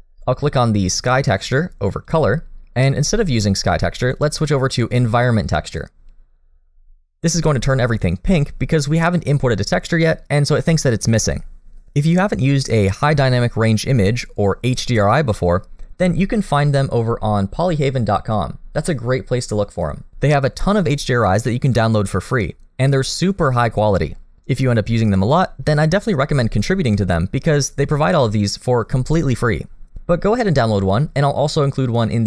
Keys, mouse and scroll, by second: 2.0 click.